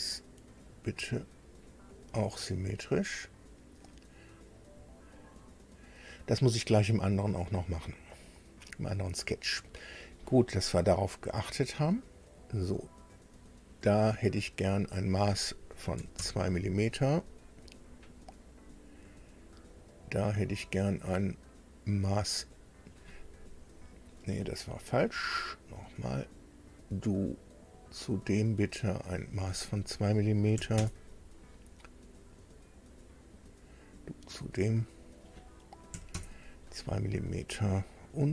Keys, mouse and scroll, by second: 0.6 click, 1.9 click, 4.6 click, 12.2 click, 13.1 click, 14.6 click, 16.0 KP_2, 16.2 KP_Enter, 18.5 click, 19.7 click, 22.5 click, 25.2 click, 26.8 click, 27.8 click, 29.0 click, 30.6 KP_2, 30.8 KP_Enter, 32.9 click, 33.7 click, 34.8 click, 35.9 KP_2, 36.1 KP_Enter.